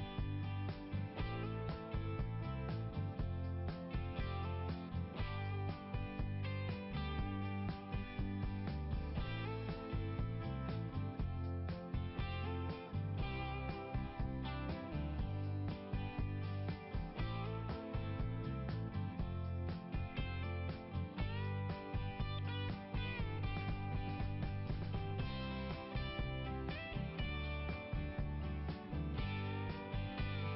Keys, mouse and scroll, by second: 0.0 click, 1.7 right click, 2.7 click, 3.8 click, 4.1 click, 4.2 double click, 4.8 click, 5.0 double click, 5.0 click, 5.2 click, 5.4 click, 5.5 double click, 6.3 double click, 7.2 d, 9.5-11.0 typing, 12.3-15.6 typing, 16.1 Return, 17.7 right click, 18.7 click, 19.0 click, 19.6 right click, 20.6 click, 24.2 click, 27.6-28.0 scroll down 2, 30.2 click.